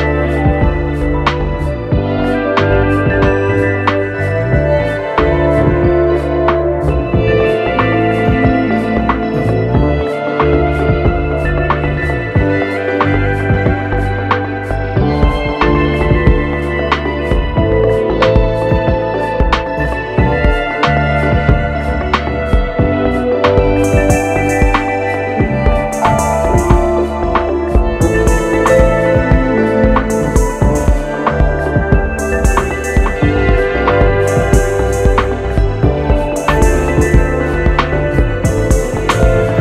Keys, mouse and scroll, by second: 3.6-27.8 drag, 30.4 Delete, 31.1-33.2 drag.